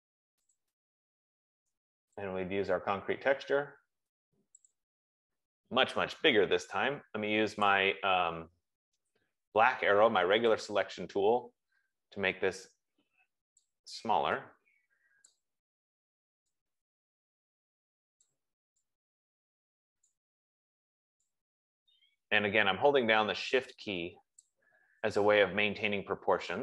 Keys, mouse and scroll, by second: 1.0 click, 2.6 click, 5.5 click, 8.1 click, 14.0 shift+click, 16.2 click, 18.6 shift+click, 20.4 click, 24.7 shift+click.